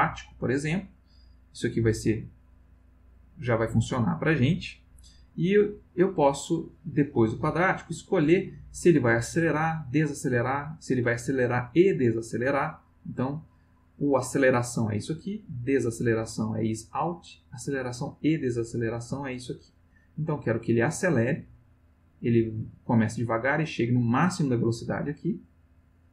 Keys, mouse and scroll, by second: 12.5 click, 21.4 click.